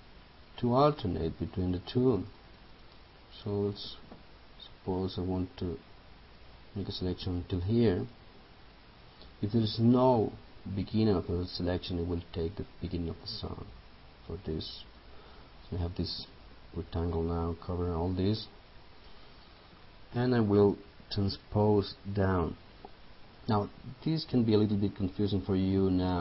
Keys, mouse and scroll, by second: 8.1 right click, 11.3-19.7 drag.